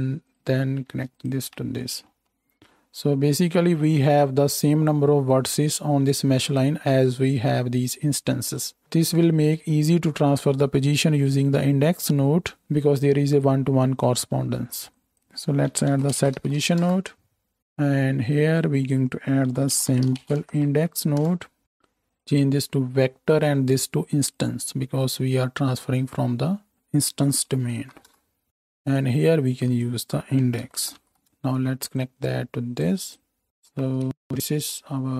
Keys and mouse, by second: 1.1 ctrl+shift+middle click, 1.2-18.6 ctrl+shift+drag, 4.5-17.6 middle drag, 4.5-17.6 right drag, 28.9-29.6 drag, 31.3-31.9 drag, 33.6 shift+Left, 34.1 space.